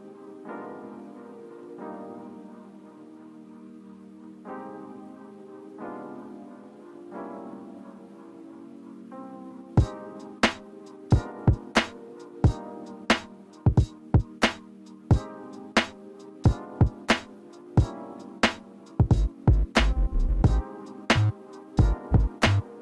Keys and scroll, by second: 4.6 ctrl+x, 9.3 ctrl+f, 17.5 ctrl+alt+space.